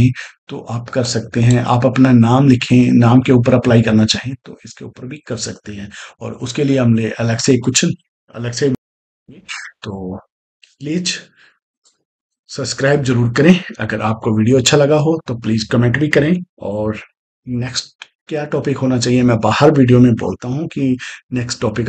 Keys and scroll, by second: 8.7 space.